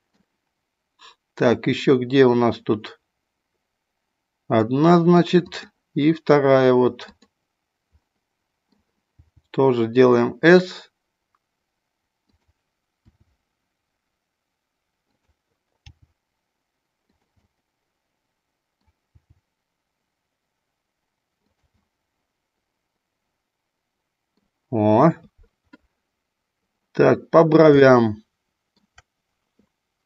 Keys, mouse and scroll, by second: 4.6 middle click, 5.4 click, 7.0 click, 8.0 middle click, 9.1 g, 12.3 click, 13.0 s, 15.1 click, 15.8 g, 17.1 click, 17.4 scroll up 1, 17.7-18.9 middle drag, 19.1 g, 21.5 click, 21.8-24.4 middle drag, 27.8 shift+middle click.